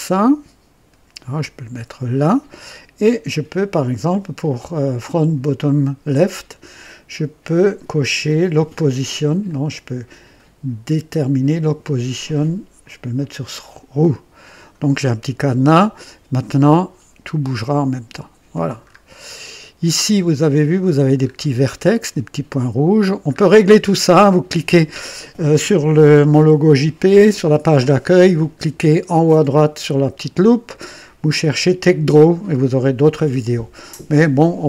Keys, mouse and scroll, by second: 9.4-10.1 drag, 11.4 click, 12.0 click, 13.1 click, 14.3 click, 16.4-18.6 drag, 18.7-19.5 scroll up 2, 19.8-20.4 right drag, 20.5 right click, 21.1-21.4 scroll up 1, 21.7 scroll up 1, 22.2-23.4 middle drag.